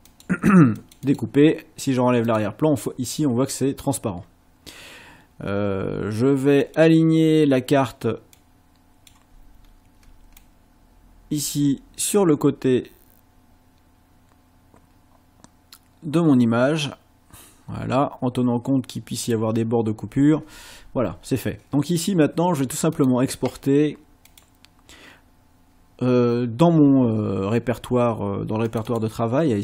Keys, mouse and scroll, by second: 0.1 click, 0.8 click, 2.3 click, 6.6 click, 8.3 click, 9.6 ctrl+scroll down 2, 10.4-19.5 ctrl+drag, 22.9 click, 24.3 click, 28.7 click.